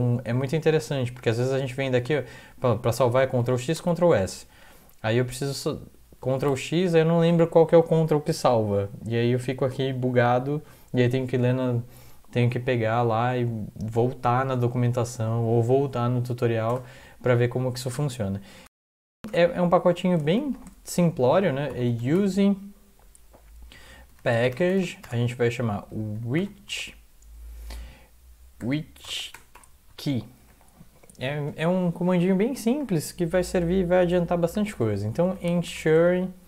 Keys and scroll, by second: 3.4 ctrl+x, 3.8 ctrl+s, 6.5 ctrl+x, 16.7 Return, 19.3 Return, 23.9-27.2 typing, 28.6-32.2 typing, 32.3 Left, 32.7 Return, 34.5-36.4 typing.